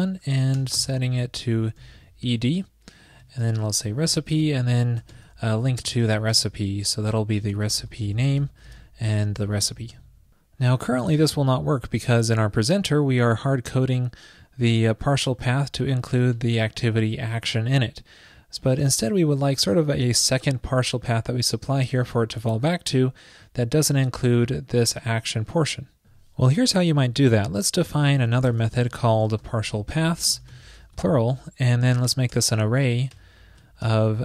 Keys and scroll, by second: 3.3 super+Right, 4.4 super+Return, 5.2 ctrl+shift+>, 10.0 super+s, 27.0 super+Right, 27.0 shift+super+Left, 27.9 super+x, 28.2 super+Right, 33.6 super+Right.